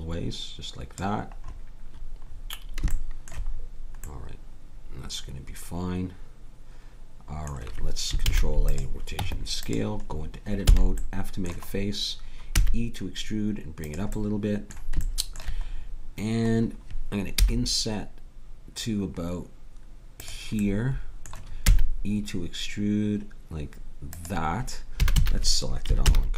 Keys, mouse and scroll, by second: 2.2-6.4 middle drag, 8.3 ctrl+a, 9.1 Tab, 10.6 f, 12.5 e, 17.4 i, 20.6-22.9 middle drag, 21.7 e, 25.0 a, 25.2 a, 26.0 ctrl+n.